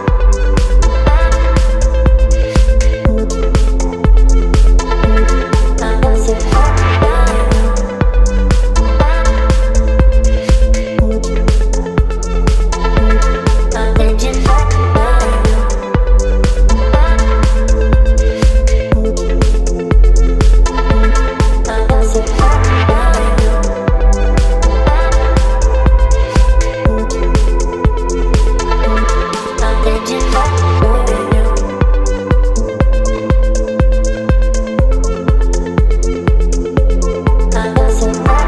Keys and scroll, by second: 6.3 b, 7.5-8.2 typing, 10.7 ], 11.9 space, 13.5 space, 17.2 space, 19.4 v, 29.8 space, 31.2 b, 37.8 ctrl+z.